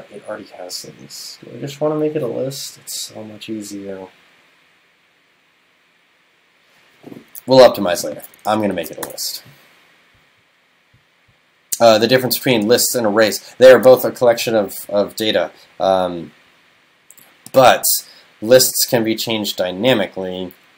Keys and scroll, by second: 8.8 shift+super+Left.